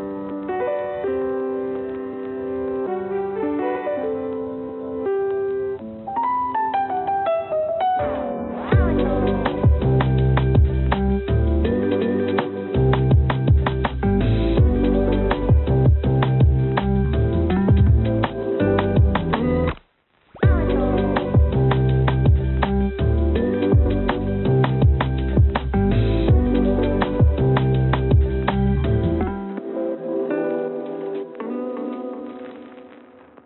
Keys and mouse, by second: 3.3 r, 5.3 g, 5.4 g, 6.0 click, 6.6 a, 8.5 a, 8.9 click, 9.5 click, 10.4 click, 11.8 click, 13.1 click, 14.2 g, 16.5 a, 18.0 click, 18.3 click, 18.9 click, 19.1 click, 19.6 click, 19.8 click, 20.4 click, 20.6 click, 22.4 click, 23.5 click, 23.8 click, 25.5 click, 27.1 g, 28.0 click, 28.5 click, 29.6 click, 30.5 click, 30.8 click, 31.4 click, 32.5 click, 33.3 g.